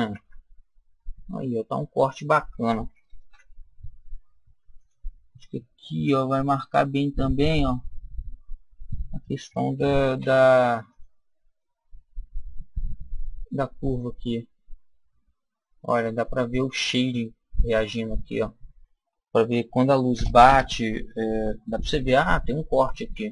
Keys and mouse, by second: 0.0 Tab, 1.6 Tab, 3.2 ctrl+r, 10.8 click, 11.5-13.4 middle drag, 21.6-23.3 middle drag.